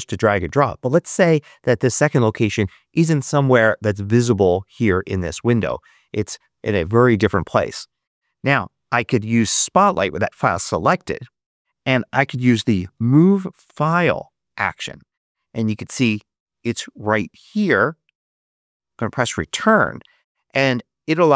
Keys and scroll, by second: 10.4 super+space, 12.1-14.0 typing, 18.4 Return.